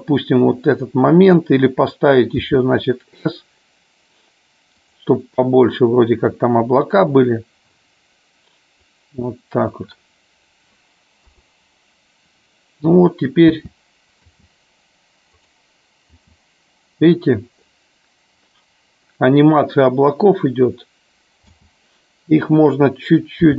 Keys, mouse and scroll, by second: 5.6-8.9 drag, 11.3 KP_0, 13.7 space, 14.3 space, 21.7 space, 23.4 r.